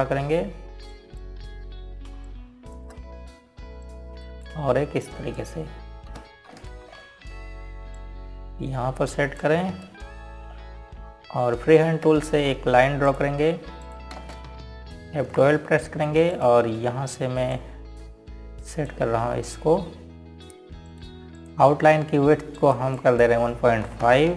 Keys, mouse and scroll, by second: 1.1 click, 2.6 shift+click, 3.9 shift+click, 5.5 click, 5.9 ctrl+right click, 6.7 click, 8.2 g, 8.6 scroll down 1, 9.6 click, 11.3 scroll up 1, 12.2 scroll down 1, 13.6 F5, 14.7 click, 15.8 ctrl+space, 16.9 F12, 18.0 click, 23.1 click.